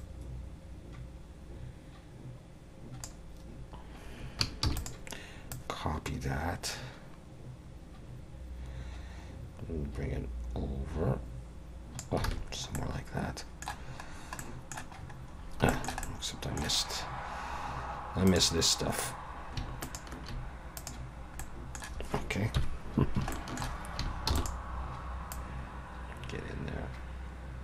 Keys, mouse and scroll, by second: 4.6 shift+d, 5.5 click, 12.3 alt+a, 12.5 scroll down 3, 12.8 middle click, 14.1-14.4 scroll down 2, 14.4 middle click, 15.0-15.5 scroll up 6, 15.7 shift+middle click, 16.0 middle click, 18.3 click, 19.8 shift+click, 20.8 click, 21.4 middle click, 22.6 KP_1, 23.3 shift+middle click, 24.3 shift+d, 25.3 click.